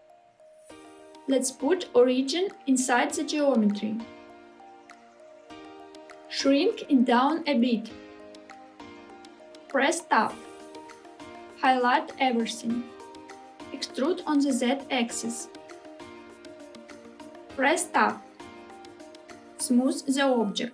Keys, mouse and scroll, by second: 0.6-5.5 right drag, 7.0 s, 9.0 click, 10.4 Tab, 11.9 a, 13.8 e, 18.6 Tab, 19.6-20.7 right drag.